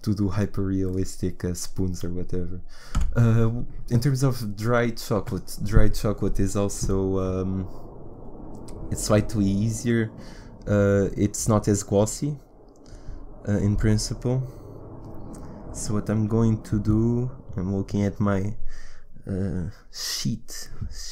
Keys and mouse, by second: 3.0 Delete, 5.1 shift+a.